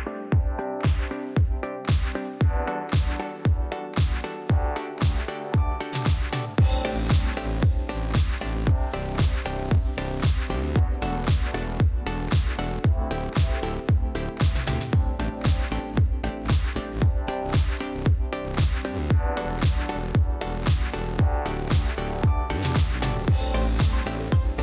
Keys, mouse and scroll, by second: 0.1 click, 0.7 click, 1.2 click, 1.7 click, 2.2 click, 2.8 click, 3.9 click, 5.9 shift+click, 7.0 click, 8.3 click, 9.6 click, 12.3 click, 13.6-14.9 drag, 18.2 shift+click, 19.9 ctrl+d, 21.8 shift+click, 22.6-23.4 drag, 23.6 ctrl+z.